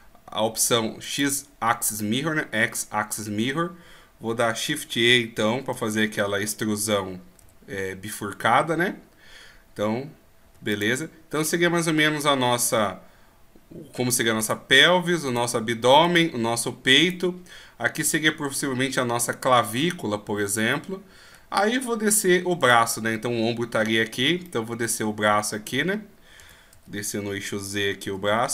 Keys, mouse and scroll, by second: 5.9 shift+e, 14.4 right click, 20.7 middle click, 22.6 right click, 24.4 middle click, 26.4 e.